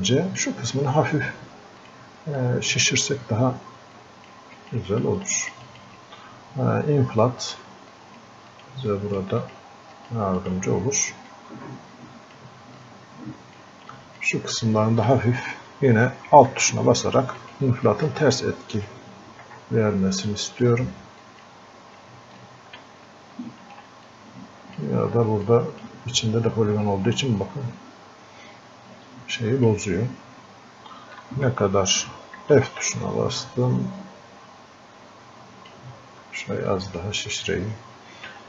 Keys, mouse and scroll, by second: 0.1-12.8 drag, 12.8 click, 14.0 click, 17.4 alt+click, 19.2 scroll up 1, 19.8 scroll down 1, 20.3 click, 22.8 ctrl+z, 24.1-25.5 drag, 25.5-29.3 alt+drag, 29.5 click, 30.0 scroll up 1, 31.2 alt+click, 32.4 f, 33.4-36.7 drag.